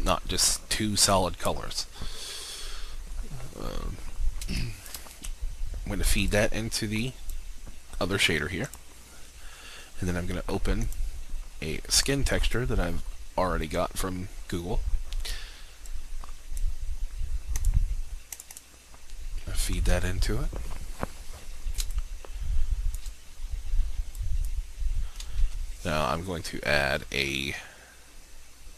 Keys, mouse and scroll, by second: 2.7-3.1 scroll down 1, 3.1-4.4 scroll up 1, 4.6 alt+shift+click, 6.4-19.5 drag, 22.0 alt+shift+click, 24.2 click, 25.4 shift+a.